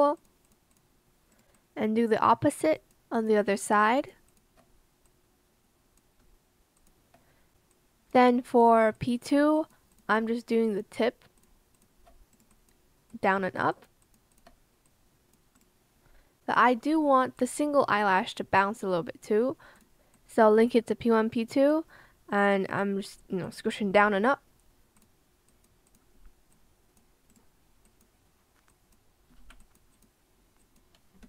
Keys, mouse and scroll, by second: 2.7 shift+click, 3.1 shift+click, 3.6 shift+click, 4.2 shift+click, 6.9 shift+click, 9.5 shift+click, 9.9 shift+click, 11.7 shift+click, 13.7 shift+click, 14.0 shift+click, 14.3 shift+click, 29.4 ctrl+z, 31.2 b.